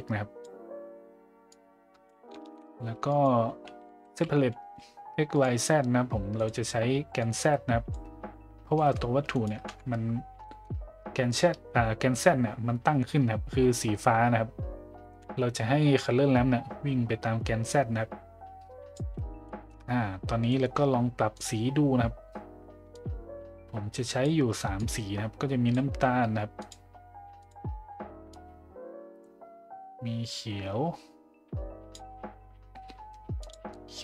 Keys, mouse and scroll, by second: 1.5-2.2 drag, 2.4 shift+a, 7.2-8.2 drag, 8.7 middle drag, 10.4 shift+middle drag, 16.0-18.9 drag, 19.4 shift+middle drag, 20.5 middle click, 21.4 click, 26.7 click, 27.4 click, 33.4 click.